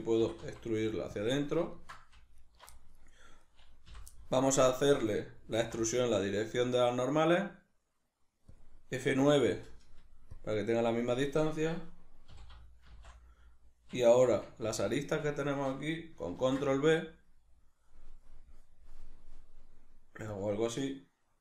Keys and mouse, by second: 0.2 e, 1.3 click, 1.4-2.4 middle drag, 2.4 alt+right click, 2.7 middle click, 3.5 right click, 3.9 l, 4.1-5.6 middle drag, 5.6 alt+e, 8.6 click, 9.2 F9, 12.9 shift+n, 14.2 2, 14.8 alt+right click, 15.4 alt+shift+right click, 16.4 ctrl+b, 20.4 click.